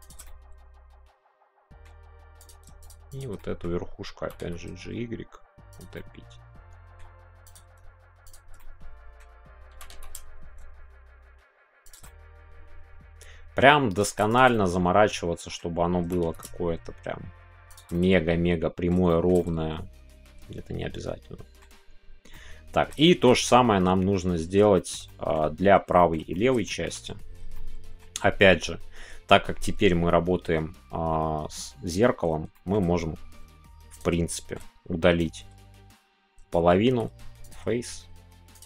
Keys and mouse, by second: 0.0 click, 0.2-1.8 middle drag, 2.4 click, 3.1 shift+click, 3.4 middle click, 5.7 click, 5.9-7.5 middle drag, 7.5 click, 8.6 middle click, 11.8 click, 12.0-13.6 middle drag, 14.5-15.5 middle drag, 16.4 shift+y, 17.7 shift+click, 17.9 middle click, 19.0 shift+click, 19.3-21.6 middle drag, 22.3 middle click, 23.0-24.9 shift+middle drag, 25.0 middle click, 26.1 shift+middle click, 26.6 shift+middle click, 27.5 middle click, 32.6 shift+middle click, 33.9 click, 34.3 shift+middle click, 35.2-38.6 drag.